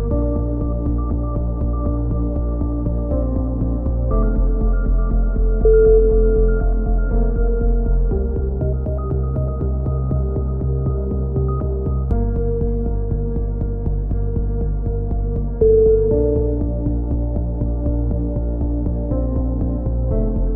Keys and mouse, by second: 0.3 a, 0.6 z, 2.3 ctrl+r, 3.4 z, 5.1-6.1 drag, 6.4 click, 7.0 right click, 7.9-9.7 right drag, 9.7 middle click, 10.5 click, 13.2 a, 15.9 ctrl+z, 16.1 ctrl+z, 16.6 click, 17.3 ctrl+z, 17.5 ctrl+z, 17.7 ctrl+z, 18.4-19.8 right drag, 19.9 click.